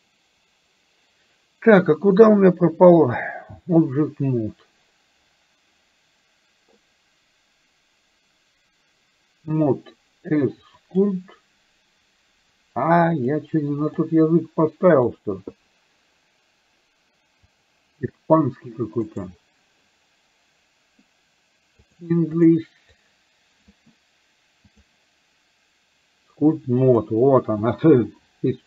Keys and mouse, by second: 10.9-13.3 drag, 14.0-15.4 drag, 27.0-28.6 drag.